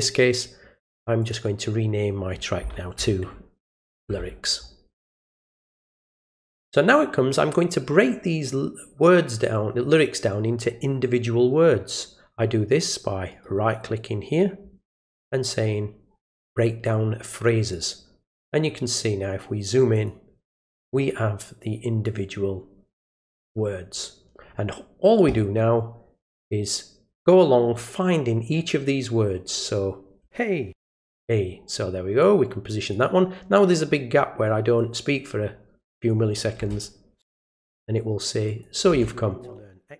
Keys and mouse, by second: 1.2 click, 5.4 click, 13.3 right click, 17.7 click, 19.9 click, 22.0-23.4 drag, 26.2-27.8 drag, 32.2 click, 33.7-34.8 drag, 38.5 click.